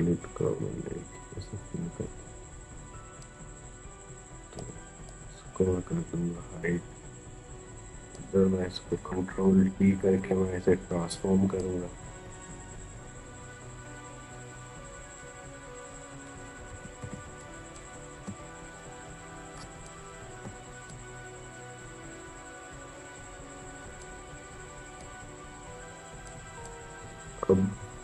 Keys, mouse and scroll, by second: 7.1-9.7 drag, 9.7 ctrl+t, 11.4-16.5 drag, 16.5 ctrl+=, 17.4 space, 17.5 click, 17.8 space, 19.7 click, 19.8 space, 20.7-26.0 drag, 27.9 e.